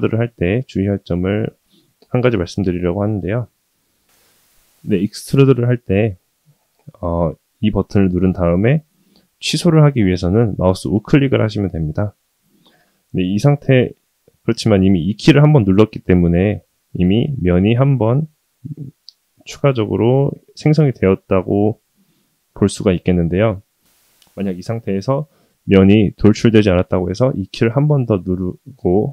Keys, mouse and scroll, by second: 0.6-1.0 shift+middle drag, 1.4-1.9 middle drag, 21.5-22.0 middle drag, 22.2 scroll up 1, 22.9 scroll up 1, 23.1 shift+middle click, 23.5 middle click, 24.2 scroll up 1, 24.5 scroll down 2.